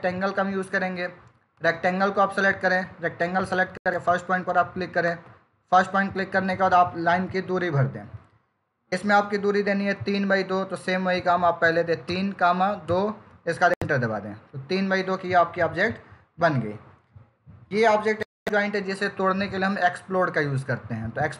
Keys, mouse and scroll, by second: 1.4 click, 4.9 click, 11.5-11.9 typing, 13.4 typing, 14.1 Return.